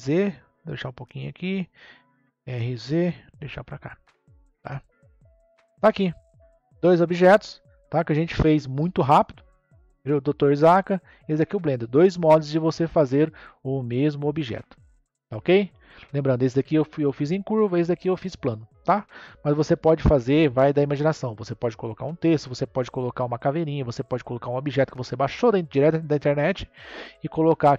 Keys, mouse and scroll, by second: 1.4 click, 2.3 r, 5.6-6.6 scroll down 5, 6.6-7.9 scroll up 4, 7.9-9.0 shift+middle drag, 9.0-9.6 scroll up 1, 9.6-14.8 middle drag, 23.4-26.5 scroll down 2.